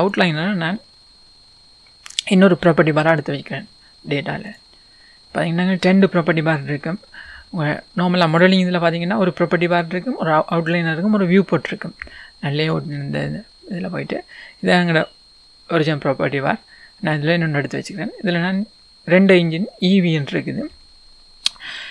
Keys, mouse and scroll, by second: 0.0-8.4 drag.